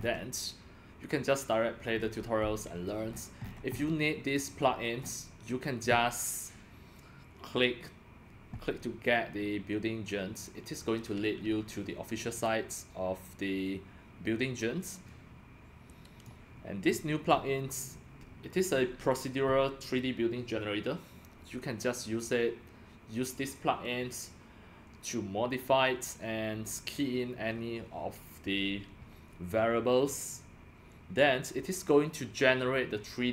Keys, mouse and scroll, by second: 0.0-1.7 scroll up 7, 1.9 scroll down 7, 2.0-4.3 middle drag, 2.0 scroll, 3.1-3.8 scroll, 4.3 scroll down 10, 4.3 click, 5.0-10.1 middle drag, 5.0-5.4 scroll up 6, 12.4-16.2 drag, 16.8-17.4 scroll down 8, 21.9-22.2 scroll.